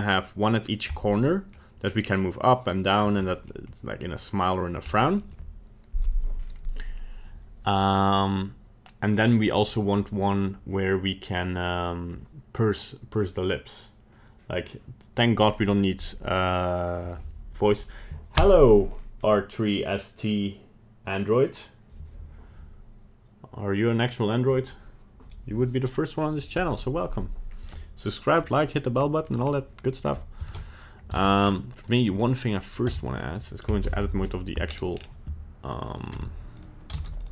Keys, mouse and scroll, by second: 1.0 middle click, 3.3 middle click, 5.0 middle click, 5.2 middle click, 28.4 middle click, 29.0 scroll up 1, 29.2 middle click, 29.4 scroll down 2, 30.0 right click, 30.5 ctrl+Tab, 30.7 right click, 31.2 ctrl+Tab, 31.4 scroll down 2, 32.2 right click, 32.9 Tab, 33.8 KP_1, 34.0 KP_3, 34.7 scroll up 1, 34.9-35.8 scroll down 3, 36.2 Tab, 36.6 right click, 37.0 ctrl+Tab, 37.2 right click.